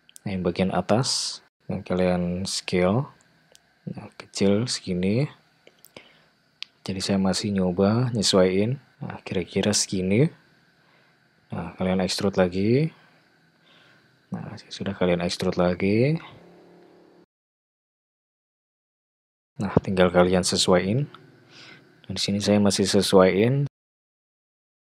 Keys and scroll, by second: 2.3 ctrl+a, 9.2 e, 14.6 e, 19.2 e, 19.7 e, 20.1 e, 22.4 g.